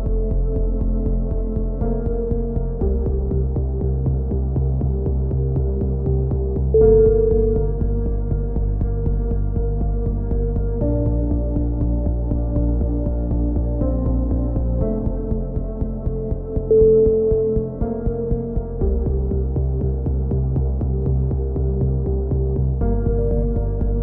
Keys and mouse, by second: 6.1-9.3 middle drag, 9.3 click, 10.1 ctrl+r, 11.2 a, 11.5 c, 12.2-13.2 drag, 14.1 a, 15.0 ctrl+r, 18.2-19.2 drag, 18.4 a, 18.8 c, 19.3-20.3 drag, 20.7-23.6 middle drag.